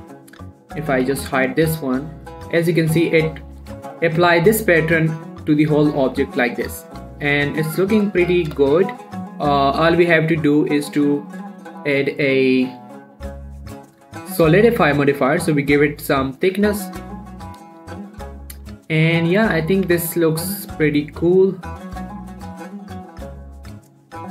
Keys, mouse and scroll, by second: 0.4 click, 1.4 h, 1.6 scroll down 1, 1.7 middle click, 2.0-2.3 scroll up 1, 2.3 middle click, 3.2-3.5 scroll up 2, 3.5 click, 3.7 scroll down 1, 3.8 middle click, 4.0 scroll up 1, 4.2 scroll down 1, 5.4 scroll up 1, 5.6-6.1 scroll down 1, 6.1-9.1 middle drag, 9.2 scroll up 1, 9.3 middle click, 10.2-10.7 scroll up 1, 10.7 click, 15.4 click, 16.0 middle click, 16.3-16.9 scroll up 1, 16.9 middle click, 17.5 click, 17.8 scroll down 2, 17.9 middle drag, 18.2 shift+middle click, 18.3-18.7 shift+scroll up 3, 19.3 q, 19.7 click, 20.2 q, 20.5-20.9 scroll down 1, 21.8 click, 23.5 scroll down 1, 23.6 middle click, 23.9-24.3 scroll up 1.